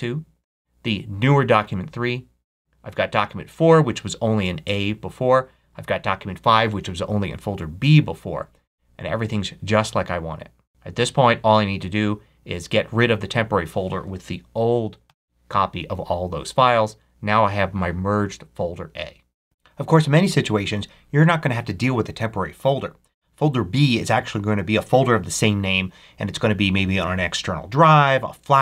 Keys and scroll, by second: 14.9 super+BackSpace.